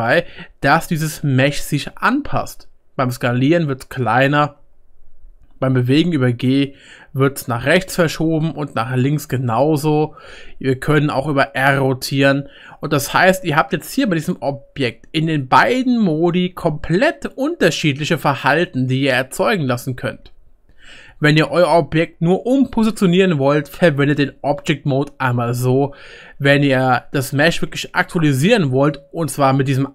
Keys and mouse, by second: 1.7-4.1 drag, 1.7-4.1 middle drag, 1.7-4.1 right drag, 6.3-9.3 drag, 6.3-9.3 middle drag, 6.3-9.3 right drag, 11.2 r, 11.6-13.4 middle drag, 16.0 click, 16.0 middle click, 16.0 right click, 21.1 Tab, 24.0 g, 29.4 Tab.